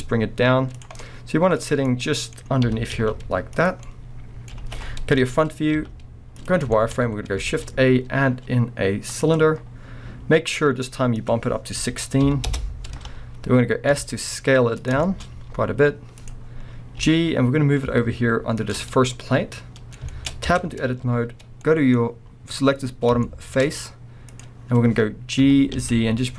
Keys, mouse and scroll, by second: 0.8 click, 0.9 scroll, 1.0 middle click, 1.4 middle click, 1.6-3.6 middle drag, 1.6 scroll, 2.6 g, 3.6 drag, 3.8-5.2 middle drag, 4.6 alt+a, 5.2 KP_1, 5.8 z, 6.7 shift+middle click, 6.9 scroll up 1, 7.4 shift+a, 11.2-14.9 drag, 12.5 Return, 13.6 scroll, 13.9 s, 15.1-16.3 shift+middle drag, 15.2 scroll, 15.5 s, 16.3 click, 16.5-17.0 scroll, 17.0 g, 19.1-20.5 middle drag, 20.5 b, 20.7-21.2 scroll up 2, 21.2-21.6 scroll up 1, 21.6 middle click, 22.2-23.2 scroll up 2, 23.2 shift+middle click, 24.3 click, 24.6-25.4 scroll down 2.